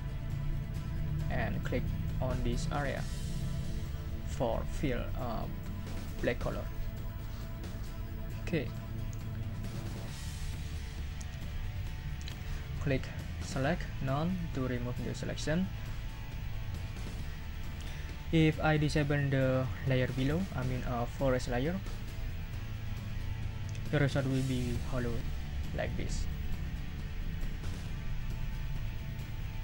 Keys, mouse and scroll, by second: 0.5 click, 6.6 click, 13.5 click, 14.2 click, 25.7 click.